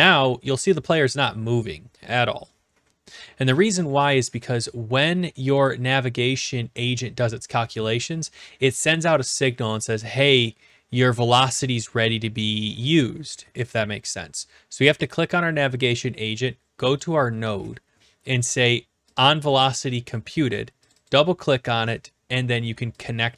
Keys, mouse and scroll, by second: 3.6-4.7 drag, 5.7-6.7 drag, 15.2-16.2 drag, 17.0 click, 19.1 click, 20.9 click, 21.0 click, 23.0 click.